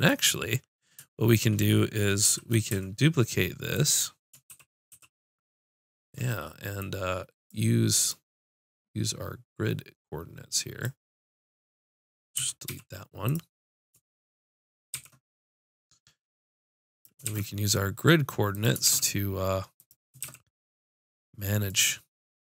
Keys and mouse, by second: 0.5-2.3 drag, 2.3 shift+d, 4.5 shift+r, 4.9 shift+r, 7.9-10.8 drag, 11.5-14.9 drag, 12.4 x, 14.9 shift+d, 17.3 shift+d, 18.9 shift+d, 20.2 shift+d.